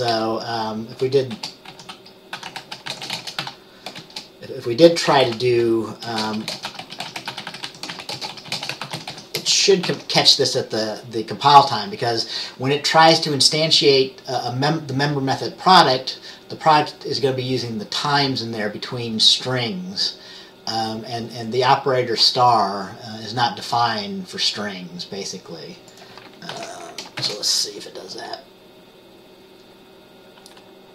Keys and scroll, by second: 0.2 BackSpace, 1.4-4.6 typing, 5.3 Right, 6.2-10.4 typing, 9.5 Return, 26.6 ctrl+s, 26.6 typing, 27.3 ctrl+b.